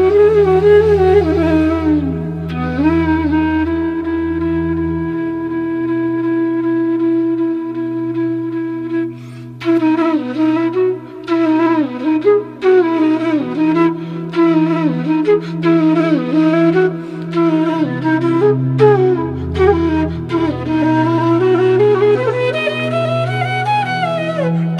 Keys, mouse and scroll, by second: 7.8 click, 9.7 click, 9.8 ctrl+click, 13.0-24.4 drag.